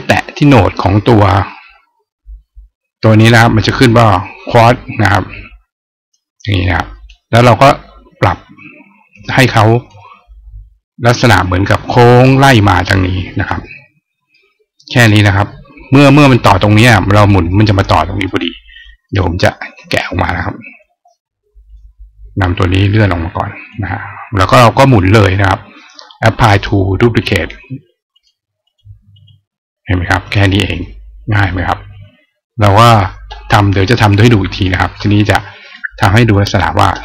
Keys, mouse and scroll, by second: 8.0-9.7 drag, 14.7 click, 18.0 right click, 18.8 right click, 19.8 click, 21.4 click, 22.7 click, 28.0 click, 28.4 click, 28.9 click, 30.1 click, 33.9 click, 34.3 right click, 35.6 click.